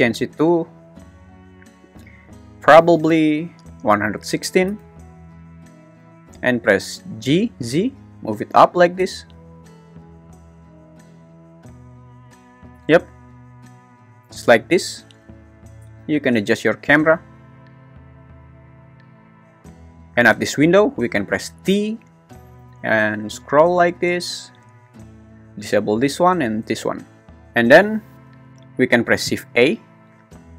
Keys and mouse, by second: 0.2 click, 7.2 g, 7.6 z, 12.7-13.4 drag, 14.3 `, 16.0 g, 16.2 y, 18.2 click, 21.5 t, 28.0 `, 29.0 shift+`, 29.2 shift+a.